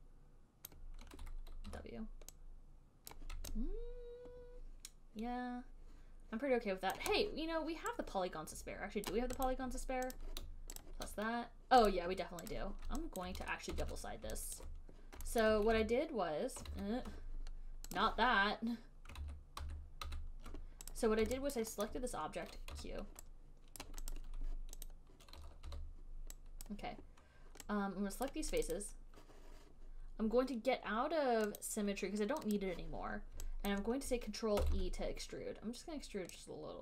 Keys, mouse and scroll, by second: 0.9 click, 2.0 w, 3.4 click, 3.4 w, 7.1 click, 7.2 alt+click, 9.3 click, 9.8 click, 10.4 click, 11.1 alt+click, 11.5 shift+click, 12.1 click, 12.8 click, 13.4 alt+click, 14.0 ctrl+e, 14.9 alt+click, 15.7 alt+middle click, 16.0 ctrl+s, 17.0 ctrl+z, 18.3 click, 19.5 ctrl+z, 19.9 ctrl+z, 20.4 ctrl+z, 21.2 click, 21.8 alt+right click, 22.2 alt+middle click, 23.1 q, 24.1 click, 24.4 click, 24.4 right click, 25.1 alt+click, 25.1 alt+scroll, 25.2 alt+click, 26.0 w, 26.3 alt+middle click, 27.0 click, 28.5 right click, 28.9 click, 29.0 click, 30.2 middle click, 31.9 click, 32.0 right click, 32.9 click, 34.1 alt+click, 34.2 alt+click, 34.9 ctrl+e.